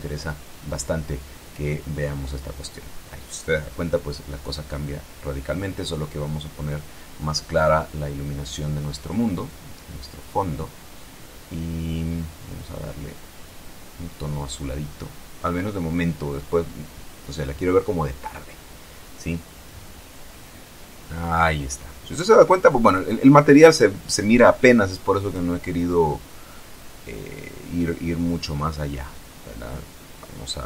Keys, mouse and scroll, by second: 1.1 F12, 5.5 middle click, 5.8 click, 6.0 middle click, 6.9 click, 8.2 click, 10.3 click, 11.4 click, 12.0 click, 13.9 click, 15.4 click, 17.1-17.8 scroll up 2, 18.7 F12, 24.1 Escape, 26.4 click, 27.7 shift+a, 29.5 click.